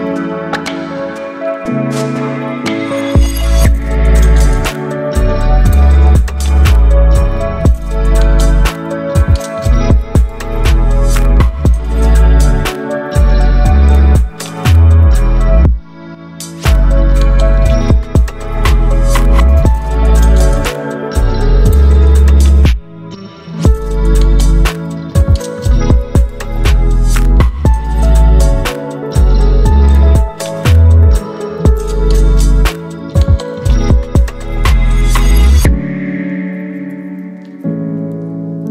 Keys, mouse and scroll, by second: 0.7 ctrl+t, 2.3-3.6 drag, 7.2 ctrl+t, 8.8-9.4 drag, 17.1 click, 19.1-20.2 drag, 23.3 click, 29.1 click, 32.0-32.7 alt+right drag, 34.4-36.3 drag.